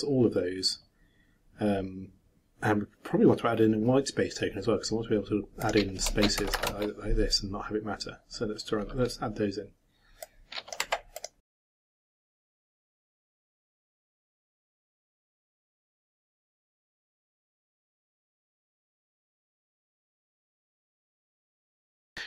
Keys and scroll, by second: 11.8 ctrl+c, 11.9 ctrl+Left, 11.9 ctrl+shift+Home, 12.0 ctrl+shift+Down, 12.1 ctrl+shift+Up, 12.2 ctrl+shift+v, 14.1 shift+8, 14.2 shift+Left, 14.3 shift+BackSpace, 14.8 ctrl+c, 15.8 ctrl+v, 15.8 ctrl+Left, 16.2 shift+Delete, 16.6-21.4 typing, 16.7 shift+Right, 16.8 shift+Delete, 17.0 shift+Down, 17.1 ctrl+shift+c, 17.1 ctrl+shift+Up, 17.2 ctrl+shift+v, 21.7 shift+Return, 21.8 ctrl+shift+s.